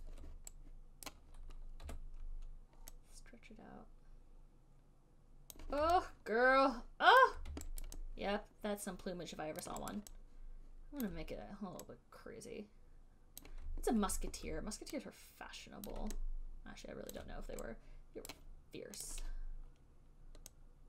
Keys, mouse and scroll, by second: 0.3 alt+click, 0.5 alt+click, 1.4 click, 1.5 right click, 2.1 r, 5.8 click, 7.5 alt+click, 8.1 alt+right click, 9.9 alt+click, 10.2 alt+click, 11.3 alt+click, 13.0 alt+right click, 13.7 click, 16.1 click, 17.4 alt+click, 18.6 click, 19.3 right click, 19.3 click.